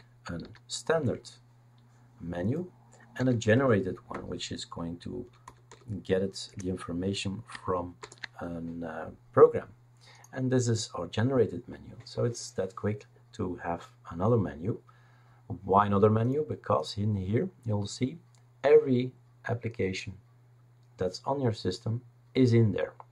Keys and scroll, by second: 0.0-0.4 typing, 0.9 Return, 3.2 F2, 3.5 Right, 4.1-5.9 typing, 6.5 Return, 8.0 ctrl+shift+BackSpace.